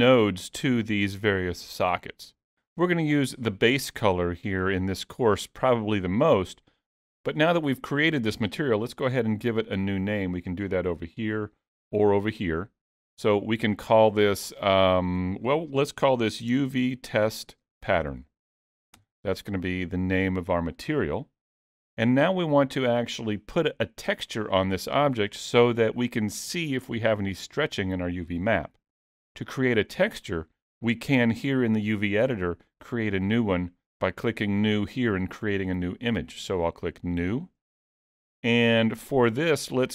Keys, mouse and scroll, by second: 2.0 middle click, 11.2 click, 13.7 click, 18.3 t, 37.1 click.